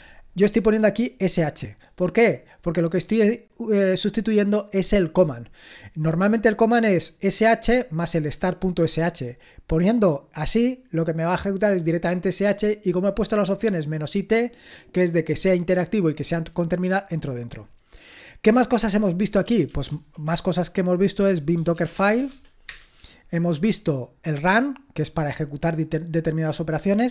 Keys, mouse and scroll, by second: 1.0 click, 14.3 click, 18.9 click, 19.9 ctrl+c, 19.9 ctrl+v, 21.0-22.7 typing.